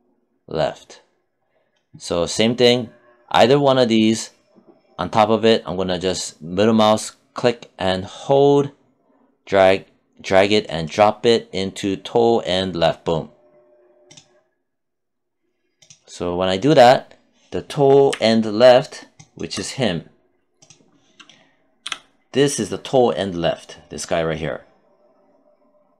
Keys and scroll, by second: 21.2 q.